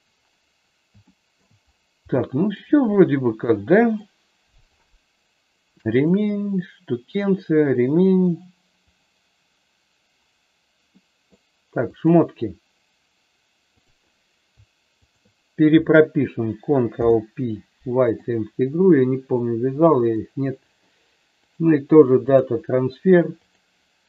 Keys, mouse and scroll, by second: 1.0 shift+middle click, 2.1 shift+middle click, 3.0-4.0 middle drag, 5.9 click, 7.0 click, 11.0 middle click, 11.9 click, 13.8 click, 15.0 shift+click, 16.9 ctrl+p, 20.0 click, 21.5 click, 23.4 click.